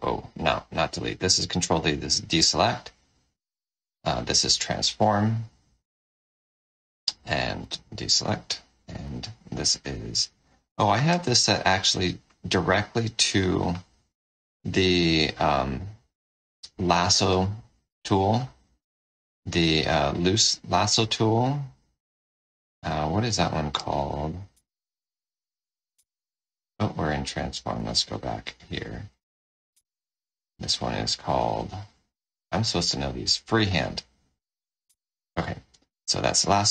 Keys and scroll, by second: 1.4 ctrl+d, 3.9 ctrl+t, 7.5 ctrl+d, 8.8 ctrl+alt+f, 13.2 ctrl+t, 24.5 F4, 27.6 ctrl+alt+f, 29.7 F4, 34.8 F4.